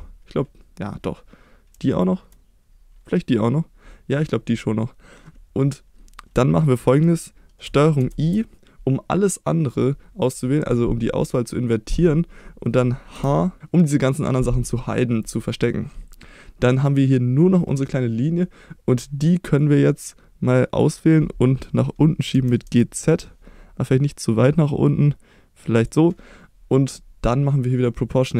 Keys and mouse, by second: 8.0 ctrl+i, 13.2 h, 19.7-20.8 drag, 22.4 g, 22.7 z, 25.9 click.